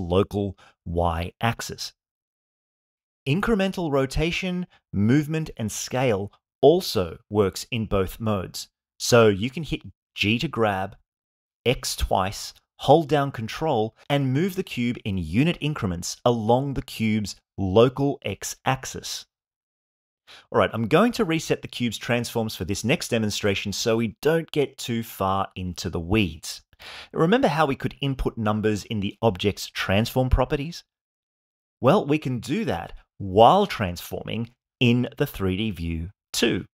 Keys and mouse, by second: 1.3 click, 10.6 x, 11.1 x, 17.1 ctrl+click, 18.7-20.8 middle drag, 22.0 alt+g, 23.0 alt+r, 23.6 alt+s, 24.1 shift+middle click, 25.2-26.2 middle drag.